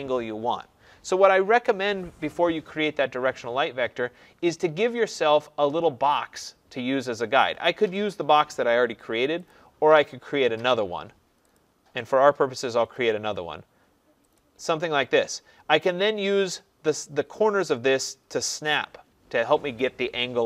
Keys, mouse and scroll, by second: 1.5 Escape, 8.1 click, 9.5 click, 10.7 click, 11.6 click, 12.7 click, 14.4 click.